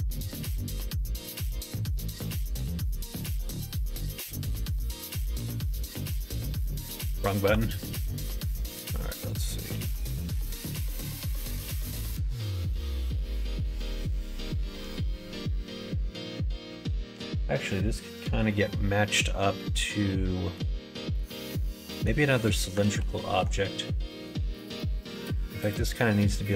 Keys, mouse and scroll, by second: 1.2 ctrl+z, 3.1 e, 6.6 ctrl+z, 7.4 r, 9.7 g, 18.9 middle click, 19.6 middle click, 21.1 middle click, 22.4 middle click, 22.8 ctrl+z, 23.3 ctrl+z, 23.7 middle click, 24.8 middle click, 25.2-26.5 middle drag.